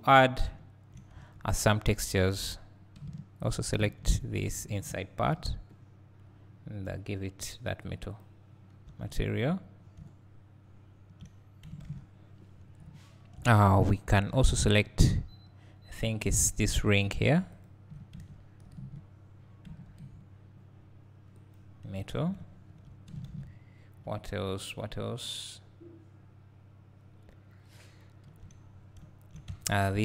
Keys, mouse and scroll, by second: 0.0-0.6 scroll up 2, 0.6 `, 1.3 Tab, 2.3 click, 5.2 ctrl+KP_Add, 7.4-7.9 drag, 8.3 click, 9.0 Tab, 9.4-9.8 scroll down 2, 9.8 scroll up 2, 10.0 `, 11.4-12.2 scroll down 2, 12.9 `, 13.7-14.2 scroll up 2, 14.3 Tab, 17.6 alt+click, 18.3 ctrl+KP_Add, 21.6 click, 22.1 Tab, 22.4 `, 23.6-24.1 scroll down 2, 24.1 `, 29.0 `, 29.6 Tab.